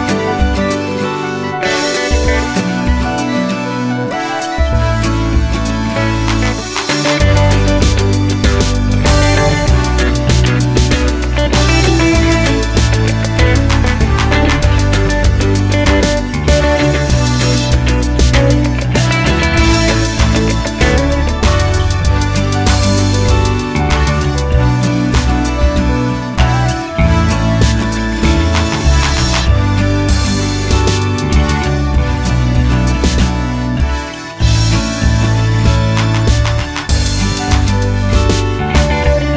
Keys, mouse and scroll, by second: 0.2 shift+d, 0.3 Return, 0.6 Tab, 0.6 middle click, 0.8 click, 1.0-2.5 middle drag, 1.7 Tab, 1.9 a, 2.3 Tab, 2.6 click, 3.5 Tab, 4.2 ctrl+z, 5.0 Tab, 5.1 click, 5.4 a, 5.6-7.5 middle drag, 6.1 a, 7.5-8.0 scroll up 1, 8.0 middle click, 9.1 click, 9.1 l, 9.5 Tab, 9.8 Tab, 10.5 a, 11.6 1, 13.2 Tab, 13.6 x, 13.8 click, 13.8 Tab, 14.1 3, 14.2 click, 14.4 alt+click, 15.2 2, 15.4 alt+click, 15.8 shift+d, 16.0 click, 16.2 p, 16.3 Tab, 16.7 Tab, 17.0 Tab, 17.2 click, 17.4 Tab, 17.7 a, 19.2 e, 19.4 a, 21.3 3, 21.5 alt+click, 22.9 shift+click, 23.5 middle click, 23.8 shift+click, 24.0 x, 25.0 middle click, 25.3 ctrl+z, 25.6 click, 25.8 shift+click, 26.6 middle click, 26.9 shift+click, 27.4 x, 27.5-29.4 middle drag, 28.7 a, 29.2 2, 29.4 alt+click, 29.7 alt+shift+click, 30.3 middle click, 30.7 alt+shift+click, 31.3 alt+shift+click, 31.6-32.1 middle drag, 32.1 alt+shift+click, 32.2-34.4 middle drag, 32.5 s, 34.4 click, 35.2 ctrl+z, 35.2-38.3 drag, 36.0 scroll down 1, 36.1 s, 38.9-39.3 drag.